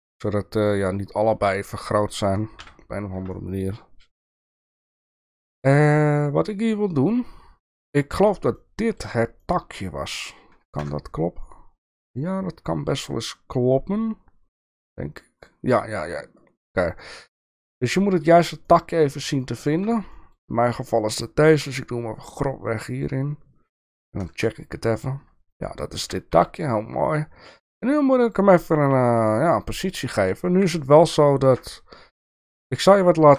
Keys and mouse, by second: 2.6 KP_3, 3.3 shift+middle click, 4.3 shift+middle click, 5.3 shift+middle click, 6.1-7.9 middle drag, 8.5-9.1 shift+middle drag, 9.6-10.3 middle drag, 10.8 KP_0, 17.0-18.3 middle drag, 18.6-19.2 middle drag, 19.4-19.8 shift+middle drag, 20.1 shift+middle drag, 21.5 g, 23.1-23.9 middle drag, 24.3 KP_0, 26.0 g, 28.8 r, 30.5 KP_7, 31.3-31.7 shift+middle drag, 32.2 shift+middle drag, 33.1 shift+middle drag.